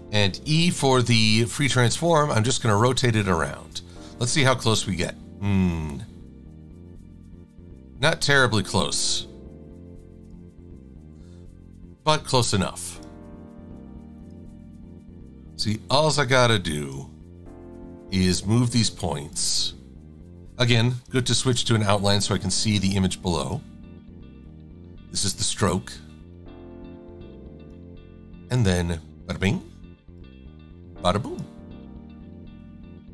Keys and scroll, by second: 21.4 shift+x.